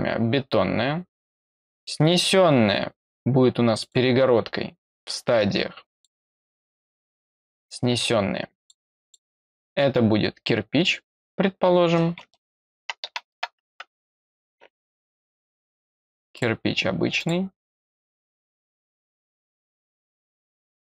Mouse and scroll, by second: 0.1 middle click, 1.7 click, 3.7 click, 4.8 click, 5.9 click, 8.5 click, 9.0 click, 16.3 click, 17.1 click, 18.5 click, 19.3 click.